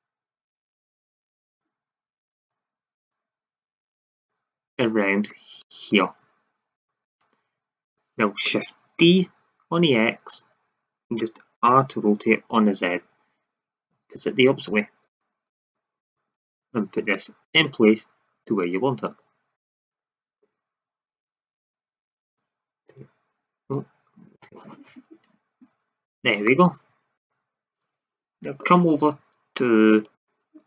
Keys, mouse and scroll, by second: 2.3-4.1 drag, 4.5-7.0 drag, 8.9 shift+d, 11.5 r, 14.7 drag, 18.6-19.5 drag, 19.7 middle click, 21.5-22.2 drag, 22.8 e, 24.3 r, 26.1 drag.